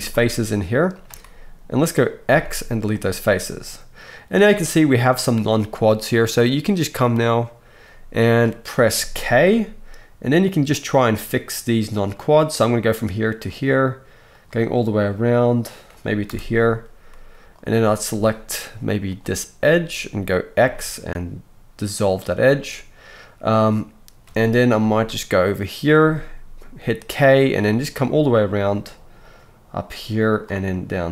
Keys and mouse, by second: 0.1 shift+middle click, 0.9 shift+middle click, 2.3 x, 9.0-17.5 right drag, 9.5 k, 17.5 middle click, 17.6-19.1 right drag, 19.1-19.7 middle drag, 19.7-31.1 right drag, 20.6 x, 25.9 k.